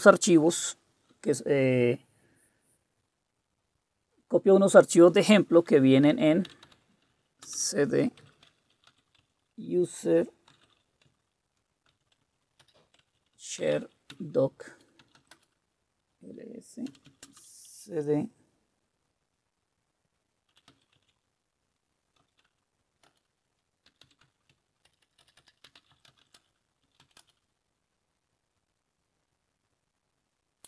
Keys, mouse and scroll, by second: 6.4-17.5 typing, 20.2-27.4 typing, 23.1 Return.